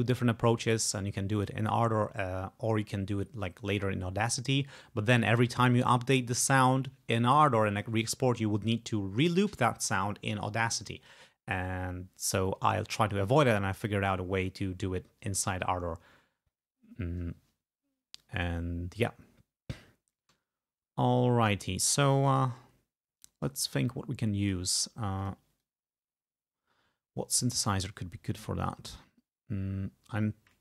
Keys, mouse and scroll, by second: 20.4 g, 22.4 right click, 23.6 click, 24.5 click, 25.3 click, 25.7-27.5 drag, 27.5 scroll down 2, 28.2 scroll down 2, 28.8-29.3 scroll down 4, 30.5 scroll down 2.